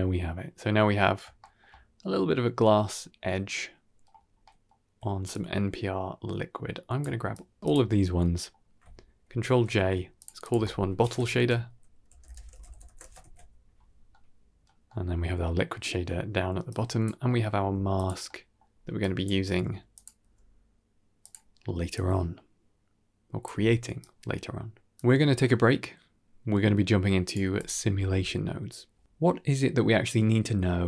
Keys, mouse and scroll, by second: 1.3 shift+middle drag, 1.6-2.5 middle drag, 3.4 middle click, 4.1-4.6 scroll down 2, 4.3 middle click, 5.2-6.9 drag, 7.2 g, 7.8-8.4 middle drag, 8.4 scroll down 1, 9.5 ctrl+j, 10.1 click, 10.3 click, 10.4 F2, 11.6 shift+t, 13.1 ctrl+s, 14.0 middle click, 14.8 middle click, 15.4-16.1 middle drag, 16.6-17.0 drag, 17.2 middle click, 17.5 g, 18.1 middle click, 18.6-19.1 scroll up 2, 18.9 click, 19.4 g, 20.1 g, 21.8-23.4 drag, 23.9-27.2 drag, 24.8 ctrl+s, 27.4 click, 27.8 ctrl+s, 28.5-29.0 scroll down 2, 28.9 middle drag, 29.8 middle click.